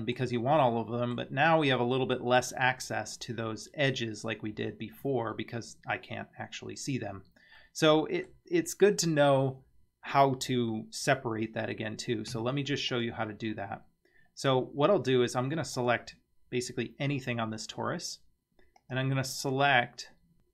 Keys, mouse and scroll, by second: 0.7 middle click, 1.5 scroll up 2, 2.0 middle click, 3.5-4.5 scroll up 2, 5.0 scroll down 2, 7.0-7.6 scroll down 2, 7.6 middle click, 12.9 click, 14.2 scroll up 3, 15.8 click, 18.8-20.5 drag.